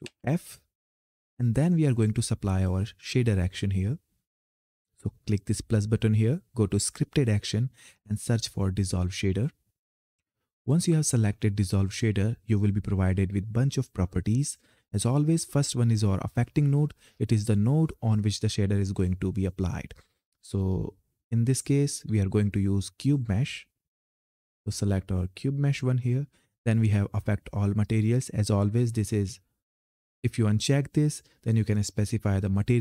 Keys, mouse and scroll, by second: 0.6 click, 4.8 click, 9.4-13.2 drag, 16.9 click, 20.4-26.7 drag.